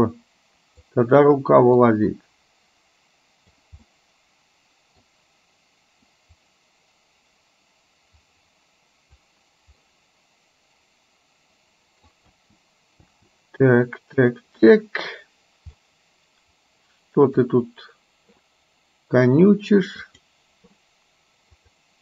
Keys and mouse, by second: 1.9 click, 2.5-3.6 drag, 3.9-5.1 middle drag, 6.4 click, 7.3-9.4 drag, 9.9-12.1 middle drag, 12.4 space, 13.3 space, 14.3 click, 16.0-17.5 middle drag, 20.1 click.